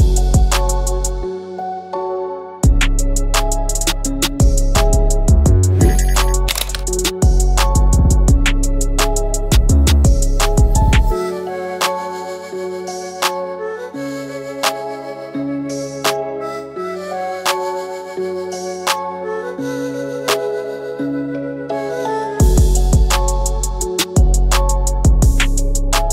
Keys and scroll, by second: 1.5 ctrl+g, 2.2 ctrl+alt+g, 2.9 ctrl+alt+g, 6.7 alt+shift+g.